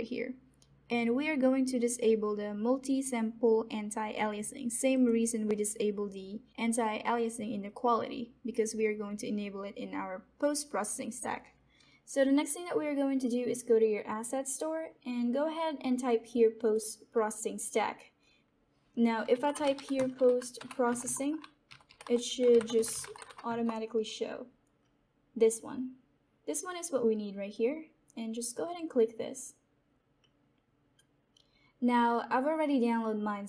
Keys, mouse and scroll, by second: 11.7 scroll, 11.7 scroll down 1, 14.0 click, 15.9 click, 19.0-23.6 typing, 28.6 click.